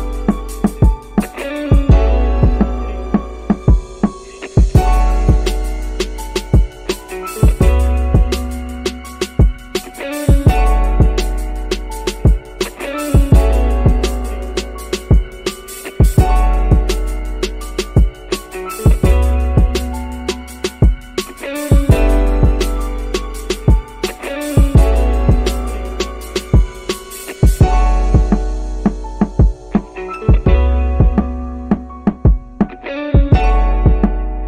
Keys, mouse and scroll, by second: 6.9 ctrl+space, 12.7 click, 13.7 click, 15.0 click, 16.3 click, 18.0 click, 23.9 ctrl+click, 26.1 g.